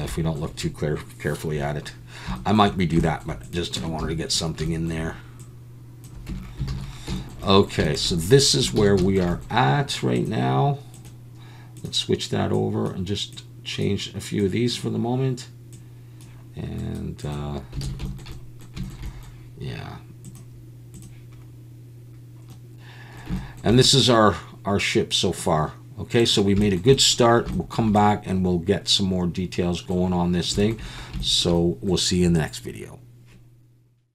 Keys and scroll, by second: 3.8 Tab, 4.0 a, 6.3 Tab, 6.7 alt+a, 8.8 ctrl+s, 17.8 alt+a.